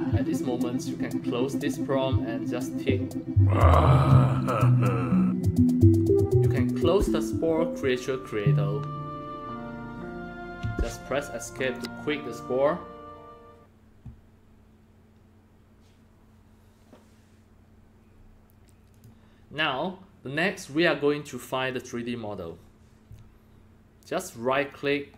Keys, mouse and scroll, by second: 0.7 click, 2.6 click, 6.7 click, 10.6 Escape, 11.6 click, 16.7 click, 18.9 click.